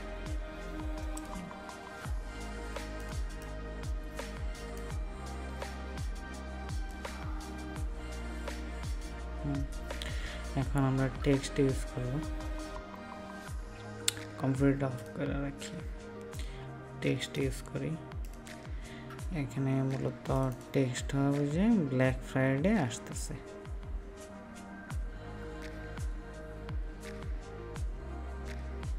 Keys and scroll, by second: 4.5 ctrl+space.